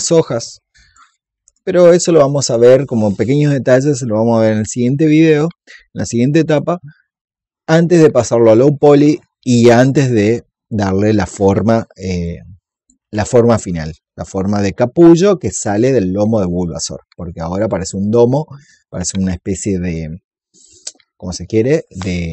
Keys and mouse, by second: 1.4 alt+click, 12.1 click, 13.1 alt+click, 17.5-19.2 drag, 19.3 alt+click.